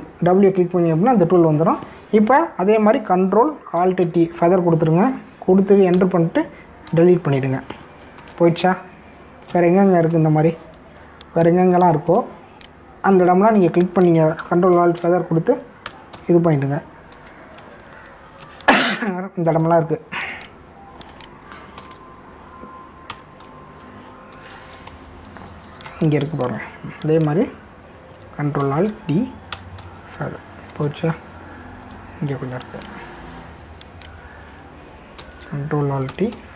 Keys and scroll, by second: 5.0 ctrl+alt+d, 6.9 Return, 7.9 Delete, 9.2 ctrl+d, 9.6 space, 16.0 ctrl+alt+d, 16.8 Return, 17.1 Delete, 18.1 ctrl+d, 18.6 space, 22.8 ctrl+alt+d, 24.1 Return, 24.4 Delete, 25.3 ctrl+d, 25.8 space, 29.6 ctrl+alt+d, 30.6 Return, 30.8 Delete, 31.7 ctrl+d, 36.2 ctrl+alt+d.